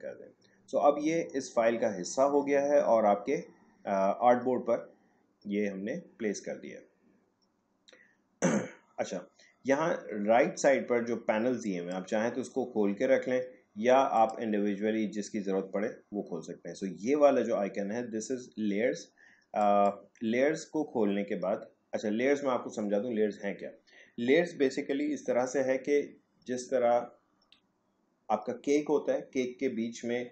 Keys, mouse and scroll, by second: 11.6 click, 14.2 click, 19.6 click.